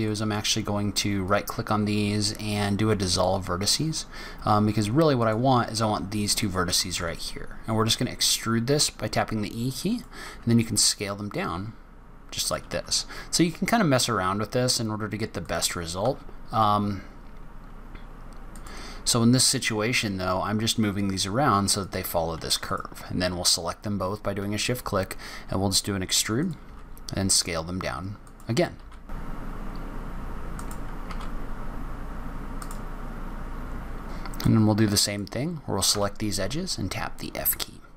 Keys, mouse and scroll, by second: 1.1 right click, 5.1 click, 6.8 e, 12.6 g, 19.3 click, 19.7 g, 22.5 shift+click, 24.3 e, 26.5 s, 28.7-32.0 typing, 30.1 click, 30.3 shift+click, 33.4 ctrl+e, 33.6 ctrl+z, 33.7 s, 34.3 click, 35.8 f.